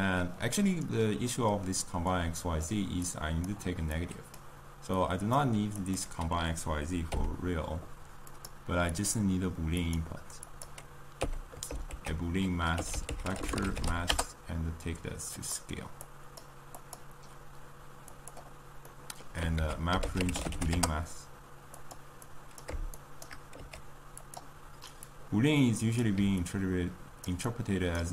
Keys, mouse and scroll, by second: 7.0 n, 10.7 click, 11.1 n, 15.9-18.8 drag, 18.8-23.4 middle drag, 23.4 shift+right click, 23.5 g, 26.4 click, 27.4-28.1 right drag.